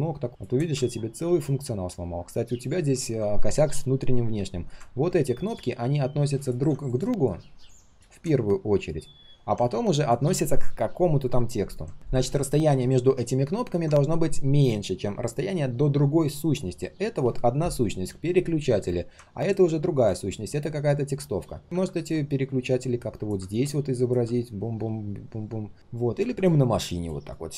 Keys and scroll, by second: 21.6 ctrl+z.